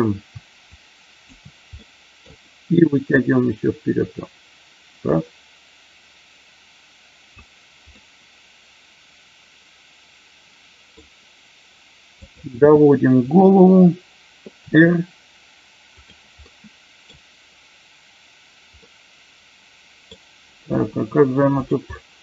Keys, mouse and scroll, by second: 0.8-1.4 shift+drag, 1.8-2.1 middle drag, 3.0-7.3 drag, 8.0-11.0 middle drag, 11.0 scroll down 1, 12.1 click, 14.6 r, 15.9 click, 16.5 middle click, 18.9-20.0 middle drag, 20.0-20.9 scroll down 1, 20.9 r, 21.5 click, 21.9-22.2 middle drag.